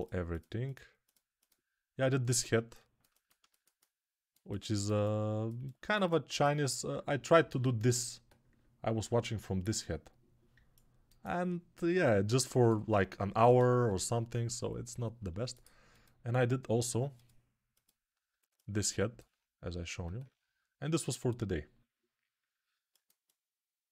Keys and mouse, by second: 2.4-10.8 alt+middle drag, 10.8-12.2 alt+drag, 12.2-23.9 alt+shift+middle drag.